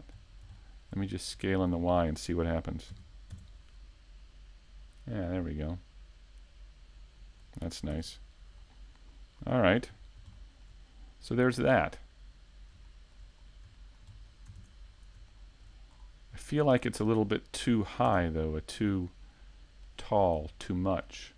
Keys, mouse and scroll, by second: 0.7 middle click, 1.3-1.8 scroll up 1, 2.3 click, 4.9 scroll up 2, 5.2 shift+middle click, 5.8 Tab, 6.3 shift+middle click, 7.0 middle click, 9.4-9.8 scroll down 3, 9.8 scroll up 1, 10.3 shift+middle click, 11.3 click, 14.0 a, 17.5 click, 19.4 click.